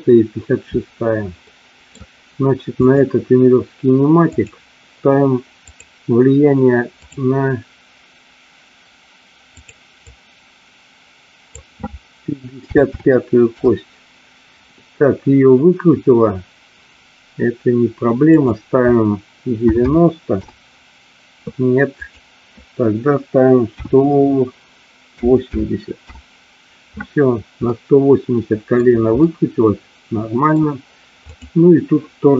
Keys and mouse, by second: 1.5 middle click, 3.0 click, 4.5 click, 5.8-7.3 drag, 9.6-14.9 drag, 12.8 KP_5, 18.4-21.7 drag, 22.2-27.0 drag, 27.7-29.0 middle drag, 29.4-30.6 middle drag, 31.4 click.